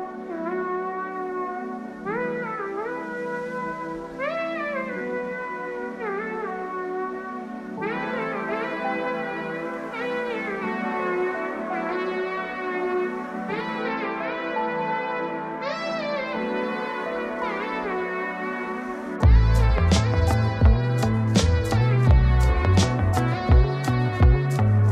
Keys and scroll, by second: 1.3 ctrl+space.